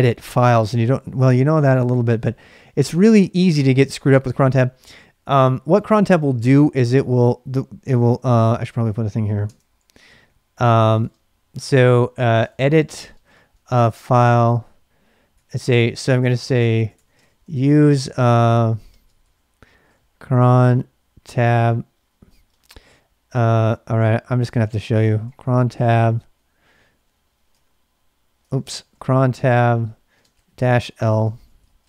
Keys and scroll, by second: 8.4 ctrl+[, 8.6 o, 9.4 Tab, 10.2-11.0 typing, 12.2-26.5 typing, 19.2 ctrl+[, 27.5 Return, 28.5 ctrl+c, 28.6-31.8 typing, 31.0 ctrl+[.